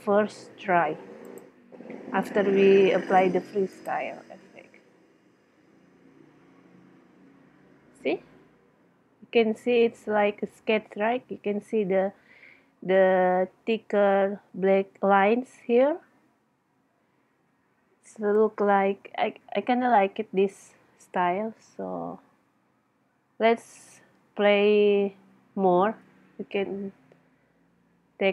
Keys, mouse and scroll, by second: 1.8 click, 25.9 Escape.